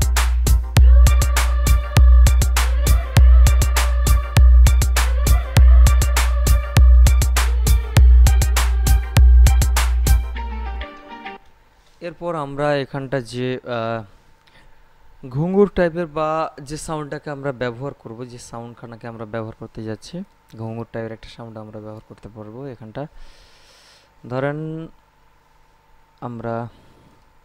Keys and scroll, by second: 11.5 space.